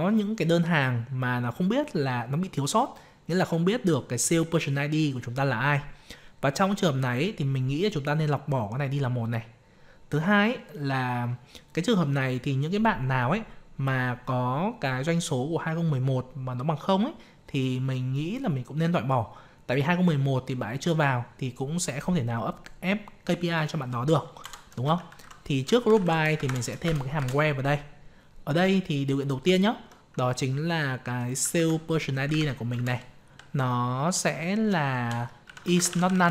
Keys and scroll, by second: 31.5 ctrl+c, 32.2 ctrl+v.